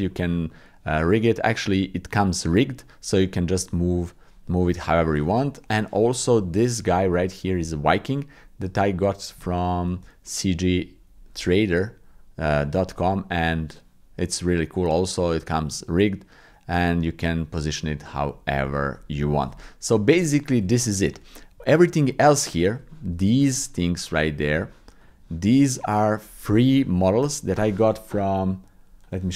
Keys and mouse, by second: 0.1-1.1 middle drag, 1.1 click, 2.8 click, 3.3 click, 3.7 middle click, 5.8 shift+click, 7.1 shift+click, 7.4 shift+middle click, 7.9 ctrl+click, 8.8 click, 9.4 shift+middle click, 10.2 ctrl+middle click, 13.0 click, 13.1-17.1 middle drag, 17.7 middle click, 18.6 shift+middle click, 19.2 ctrl+middle click, 19.6 shift+middle click, 21.7 shift+middle click, 22.9 shift+middle click, 24.5 click.